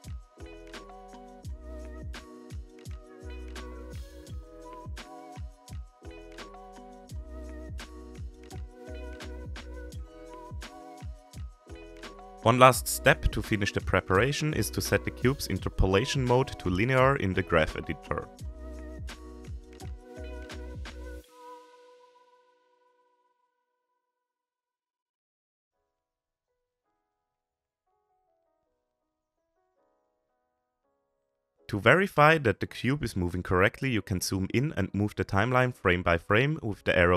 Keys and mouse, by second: 0.6 g, 3.8-4.3 shift+middle drag, 5.4 g, 8.2 i, 11.3 click, 15.0 a, 18.7 click, 23.7-24.4 drag, 29.1 drag, 31.0-31.9 drag, 32.5-33.1 drag, 33.5-33.9 shift+middle drag, 36.6 Right.